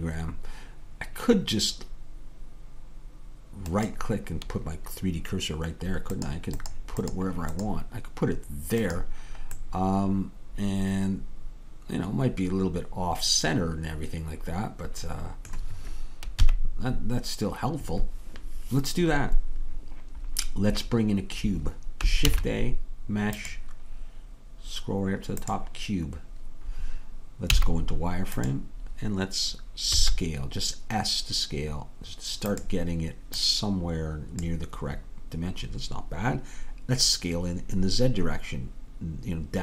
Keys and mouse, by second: 9.0-14.3 right drag, 9.7-14.3 middle drag, 16.5 KP_3, 22.3 shift+a, 27.6 z, 30.0 s, 33.4-35.6 drag.